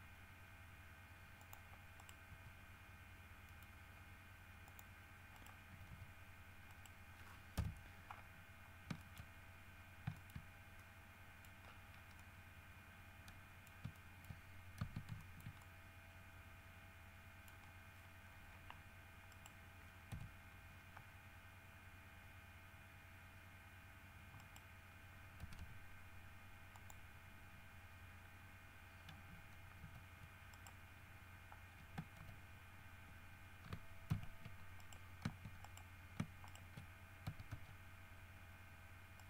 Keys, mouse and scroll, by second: 1.6 click, 2.2 right click, 2.5 g, 3.7 click, 4.9 click, 5.5 right click, 5.9 g, 6.9 right click, 7.7 KP_7, 8.8 scroll up 2, 9.2 shift+middle click, 9.9-10.3 scroll up 2, 10.3 Caps_Lock, 10.3 middle click, 11.0 middle click, 11.8-12.3 scroll down 2, 12.3 middle click, 12.7 scroll up 2, 14.0 Caps_Lock, 14.1 middle click, 14.7 scroll down 1, 15.5-17.8 shift+middle drag, 17.8 scroll down 1, 19.5 right click, 20.3 KP_3, 21.4 scroll up 2, 22.1 scroll up 2, 24.6 right click, 25.6 g, 26.9 click, 30.0 r, 30.7 right click, 32.4 shift+r, 34.3 shift+z, 35.0 shift+right click, 35.8 shift+right click, 36.7 shift+right click, 37.5 w, 37.7 s.